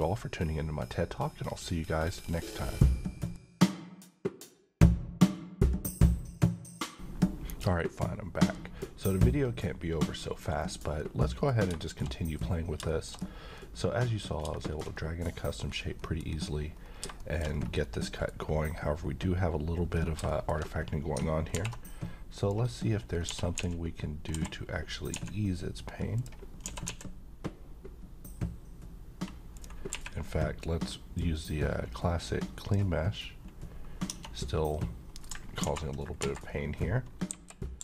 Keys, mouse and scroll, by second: 10.5-11.2 scroll up 1, 11.2 middle click, 11.5 scroll down 1, 11.8 middle click, 12.5-12.8 scroll up 1, 12.9 shift+middle click, 13.1-13.6 shift+scroll up 1, 13.6-14.5 middle click, 15.7-16.0 scroll down 1, 16.0 middle click, 16.4 scroll up 1, 17.2 shift+middle click, 17.4-17.8 shift+scroll up 2, 17.8-18.5 middle click, 18.3 scroll down 1, 20.2 middle click, 20.6-21.2 scroll down 1, 21.5 h, 22.4 click, 23.0 scroll up 1, 23.3-25.1 typing, 26.2 click, 26.6 typing, 29.5 click, 29.6 click, 29.9 q, 31.1-32.7 drag, 34.1 Tab, 34.8-35.4 middle click, 35.6 r, 36.2 Escape, 36.5-37.3 scroll down 1.